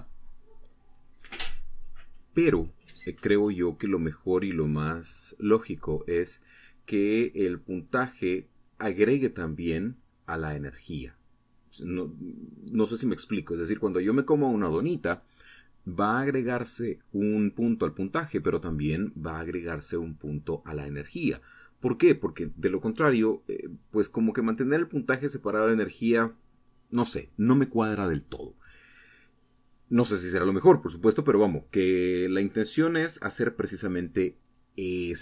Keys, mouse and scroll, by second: 6.3-6.7 scroll down 2, 6.8 middle click.